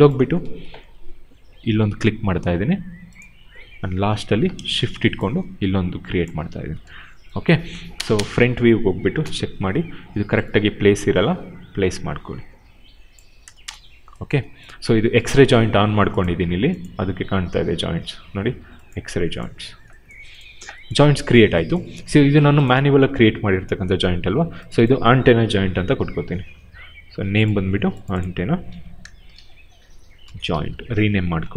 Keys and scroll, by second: 6.3 w, 7.8 space, 9.0 f, 13.3 space, 21.9 q, 25.5 ctrl+c, 28.5 ctrl+v, 29.1-31.0 typing, 31.3 ctrl+a.